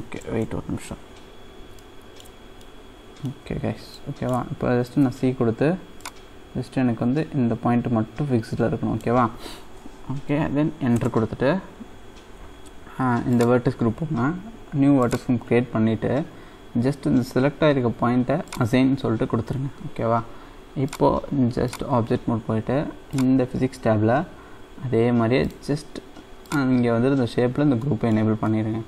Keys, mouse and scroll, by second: 0.8-1.8 scroll up 1, 1.8 middle click, 21.8-23.9 drag, 23.9-25.4 scroll down 2, 25.4-27.4 drag, 27.4-27.9 scroll down 2, 27.9 middle click, 28.4 scroll up 1, 28.5 middle click.